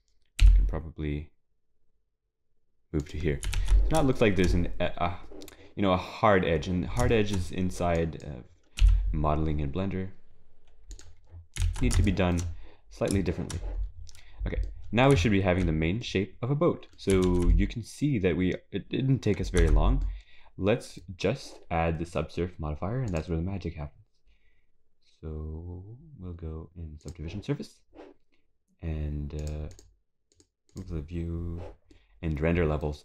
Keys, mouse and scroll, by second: 7.5 scroll up 3, 8.0 click, 10.2 e, 13.8 ctrl+shift+s, 13.8-14.7 scroll down 7.